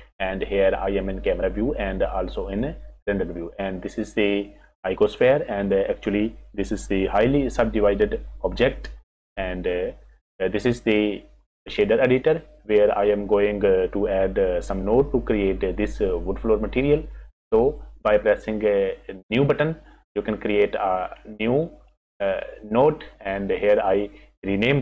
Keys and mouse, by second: 7.9 Tab, 8.6 Tab, 19.6 click, 21.7 click, 23.9-24.8 drag.